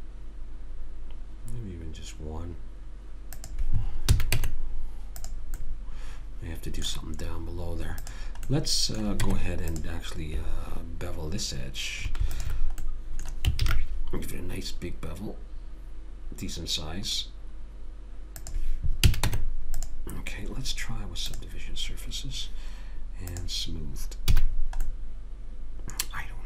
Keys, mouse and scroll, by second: 4.1 a, 4.3 Tab, 8.0 click, 9.2 Tab, 12.4 click, 13.6 ctrl+b, 19.0 a, 19.2 Tab, 21.3 click, 24.4 a, 24.6 middle click, 24.9 click, 24.9 middle click, 25.5 middle click, 26.0 middle click.